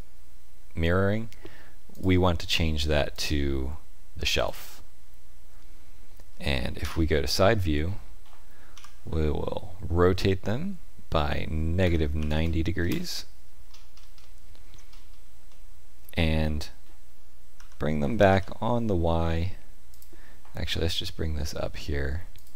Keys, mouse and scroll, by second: 1.9 click, 3.1 click, 6.7 KP_3, 8.7 r, 13.6-14.1 scroll up 4, 14.1 shift+middle click, 14.8-15.3 scroll up 3, 15.4 shift+middle click, 17.5 g, 20.6 g.